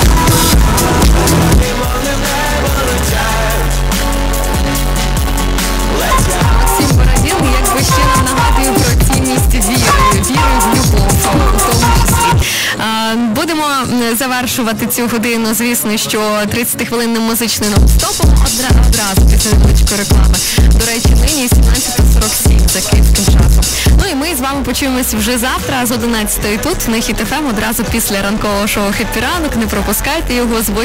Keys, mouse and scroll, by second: 1.5 Page_Down, 12.3 Page_Down, 23.9 Page_Down.